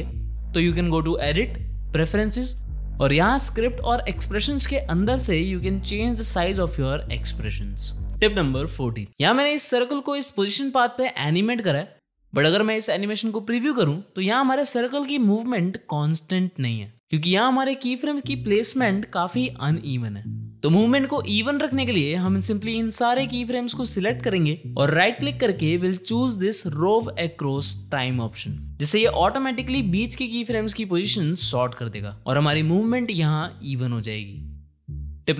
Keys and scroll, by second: 12.9 Home, 14.2 space, 17.5 Home, 17.7 space, 32.6 space.